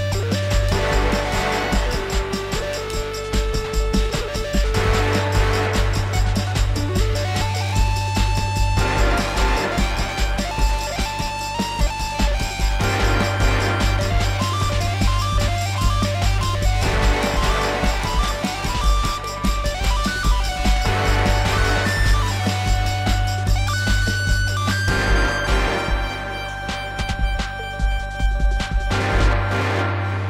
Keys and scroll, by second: 29.4 ctrl+s.